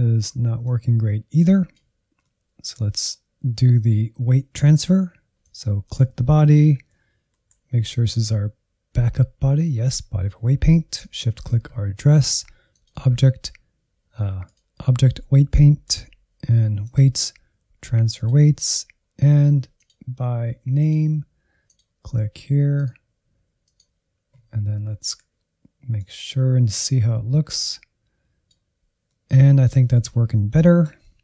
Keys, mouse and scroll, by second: 0.8 click, 1.7-3.0 middle drag, 3.0 click, 7.3 KP_Decimal, 10.9 shift+click, 12.7-24.9 drag, 24.9 Insert, 26.2-29.1 drag, 29.1-31.2 middle drag.